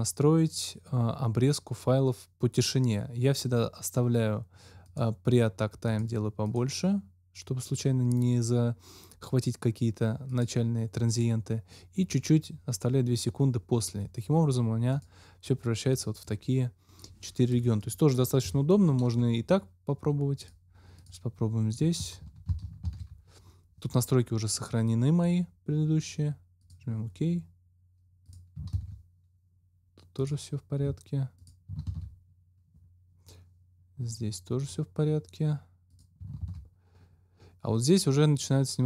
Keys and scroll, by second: 18.4 Delete, 22.8 ctrl+x, 28.6 ctrl+x, 31.8 ctrl+x, 36.4 ctrl+x.